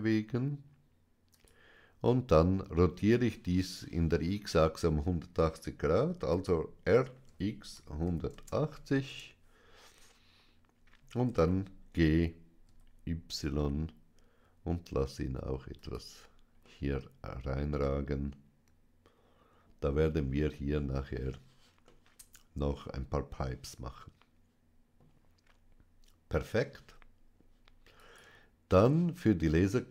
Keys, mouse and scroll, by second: 1.2 click, 6.2-8.2 typing, 9.0 KP_Enter, 11.1 g, 12.5 y, 15.6 click, 16.5-19.9 middle drag, 21.7-24.7 middle drag, 27.8-29.9 drag.